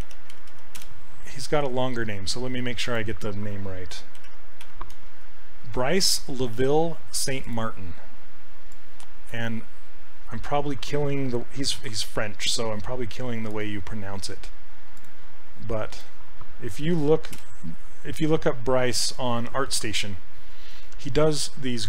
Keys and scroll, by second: 0.0-1.0 typing, 4.0-5.7 typing, 11.9 ctrl+c, 16.9 ctrl+v, 17.4 Return.